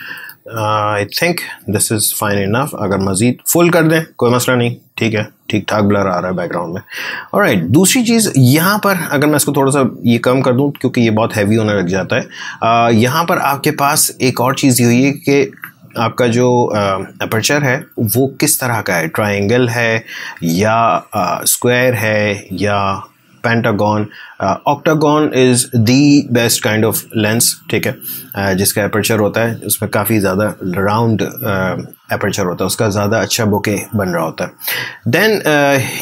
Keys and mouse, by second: 3.4-6.4 drag, 9.7 click, 13.6 click, 18.7 click, 24.6 click, 35.8-36.0 drag.